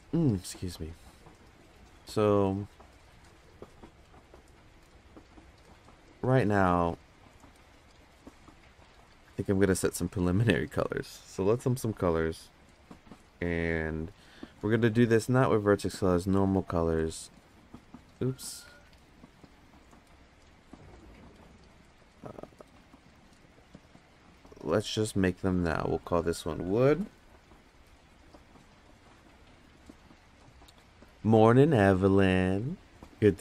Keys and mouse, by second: 10.0-10.7 drag, 13.9 click, 14.6-16.0 drag, 17.3 click, 18.1 ctrl+z, 18.7 ctrl+z, 20.4 click, 22.4 click, 23.2 click, 24.0-24.3 drag, 25.1-25.7 drag, 27.0-30.4 shift+drag, 27.7 o.